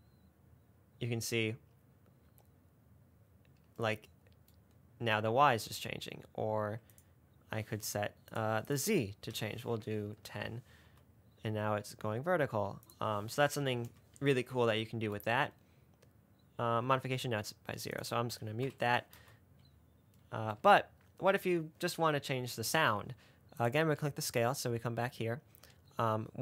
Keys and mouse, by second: 0.0 space, 6.2 space, 7.2-8.7 drag, 9.0-10.6 drag, 11.2 space, 12.6 space, 13.2-14.2 drag, 15.5 space, 17.1 space, 18.2 click, 18.9 m, 19.4 space, 20.8 space.